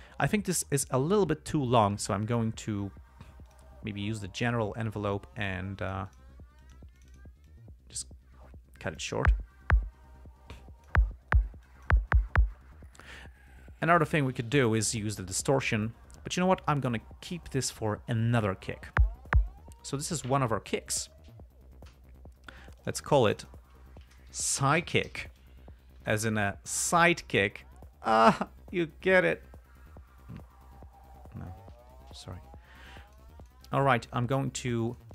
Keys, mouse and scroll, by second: 3.8 click, 5.8-6.7 drag, 6.9 click, 7.3 click, 7.8-9.5 drag, 10.9-11.4 drag, 12.0 click, 21.2 click, 22.2 g, 23.1 click, 23.6 click, 24.4-26.0 typing, 26.3 Return, 32.1 g, 32.8 click, 33.8 ctrl+click, 34.1-35.1 ctrl+drag.